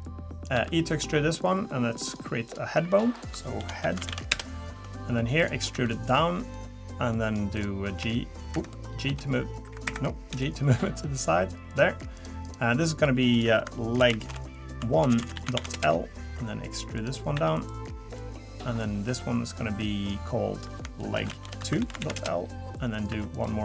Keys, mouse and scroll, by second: 0.0 click, 0.5 e, 1.4 click, 2.4 click, 3.1 click, 5.4 click, 5.7 e, 6.5 click, 7.5 click, 8.0 f, 9.1 f, 10.3 g, 12.1 click, 12.4 click, 13.3 click, 15.2 BackSpace, 17.0 click, 17.3 e, 18.2 click, 20.5 click, 23.1 e.